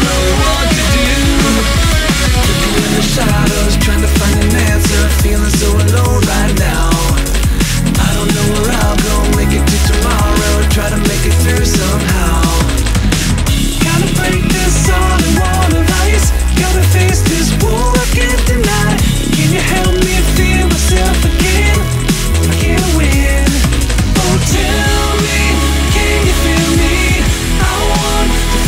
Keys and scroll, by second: 2.7 scroll down 1, 5.7 scroll up 1, 5.8 ctrl+z, 12.2 scroll down 1, 12.3 ctrl+z, 13.8 scroll down 1, 13.9 ctrl+z, 15.6 ctrl+z, 15.7 scroll down 1, 15.9 ctrl+z, 17.7 scroll up 1, 17.9 scroll down 1, 18.1 ctrl+z, 21.0 scroll up 1, 21.1 scroll down 1, 21.1 ctrl+z, 22.7 scroll up 1, 23.6 ctrl+z, 23.7 scroll up 1, 24.2 ctrl+z, 26.0-28.4 scroll down 1.